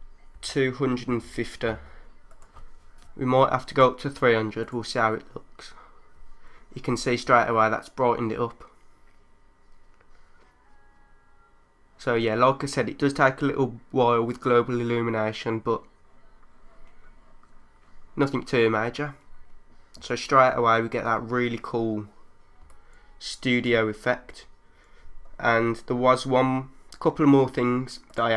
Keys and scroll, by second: 0.4 2, 1.1 5, 22.6 3.